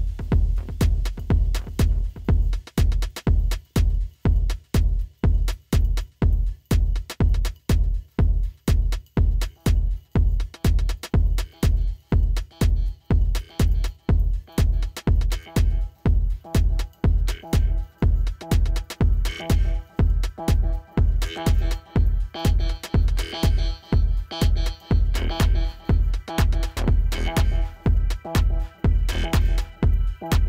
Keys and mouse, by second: 1.7 click, 5.7 Tab, 5.7 space, 6.4 click, 6.5 space, 8.0-8.8 typing, 12.6 space, 13.0 click, 13.1 space, 14.6 click, 14.8 ctrl+=, 15.6 space, 15.7 click, 15.8 space, 16.2 click, 19.8-21.1 typing, 20.0 click, 20.3 ctrl+-, 20.5 ctrl+=, 20.7 click, 21.1 click, 23.4 space, 23.5 click, 24.4 space, 24.5 click, 25.3 space, 25.3 click, 28.5 space, 28.6 click, 29.5 space, 29.5 click, 29.7 space, 30.1 click, 30.2 space.